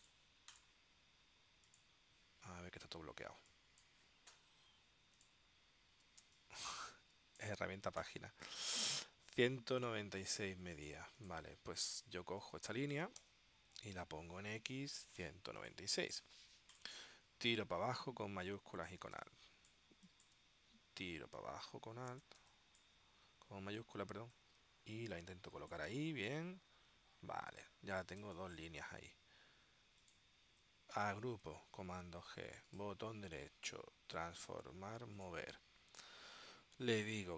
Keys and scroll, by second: 6.3 space, 12.6 space, 13.4 v, 19.3 space, 22.5 space, 28.3 space, 31.4 super+g.